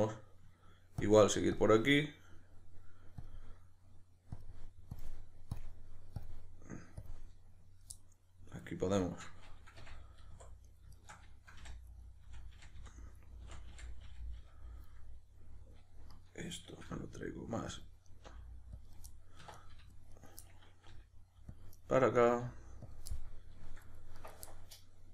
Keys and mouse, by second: 1.0 ctrl+click, 7.9 middle click, 9.0 shift+right click, 9.8 f, 10.6 right click, 10.9 shift+right click, 11.6 f, 11.9 right click, 12.2 f, 15.0-16.1 middle drag, 16.1 right click, 16.9 g, 17.8 click, 18.1 right click, 18.2 g, 18.9 click, 19.1-20.2 middle drag, 19.4 1, 20.2 right click, 20.4-21.6 middle drag, 20.9 g, 21.6 click, 21.7-22.2 middle drag, 22.2 right click, 22.4 g, 22.9 click, 23.1-24.1 middle drag, 24.1 right click, 24.5-25.1 middle drag.